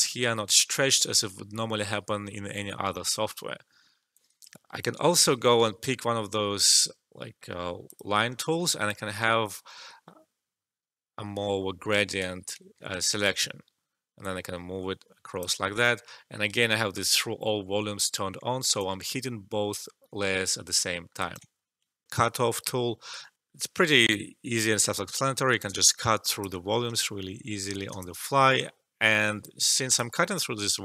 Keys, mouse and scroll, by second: 3.7 alt+middle click, 4.1 alt+click, 4.9 e, 7.8 click, 8.4 alt+middle click, 8.8-11.9 drag, 12.9 click, 13.0 alt+right click, 14.1-18.5 drag, 18.5 alt+middle click, 18.8-20.9 alt+drag, 20.9 alt+middle click, 21.1 alt+right click, 22.0-23.3 alt+drag, 23.3-24.8 drag, 24.8 alt+click, 25.8 click, 26.9-29.6 alt+drag.